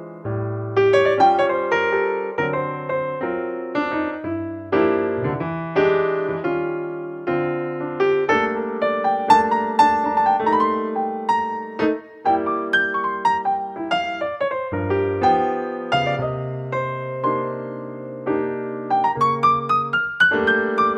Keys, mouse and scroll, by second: 8.7-11.6 drag, 15.5 KP_0, 17.1-19.0 drag.